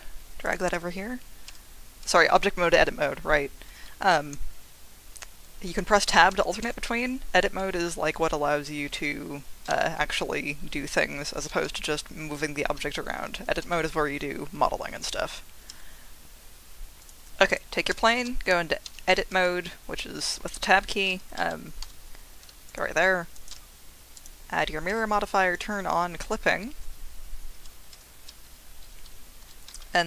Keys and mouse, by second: 0.4 click, 0.7 Tab, 1.5 Tab, 5.7 Tab, 6.3 Tab, 11.3 Tab, 11.7 g, 12.6 Escape, 13.6 Tab, 15.7 Tab, 17.1 click, 17.9 Tab, 19.1 Tab, 21.1 a, 21.8 g, 22.7 click, 23.3-24.2 drag, 24.9 Tab, 25.5 click, 27.5 Tab, 29.4 g, 29.7 x.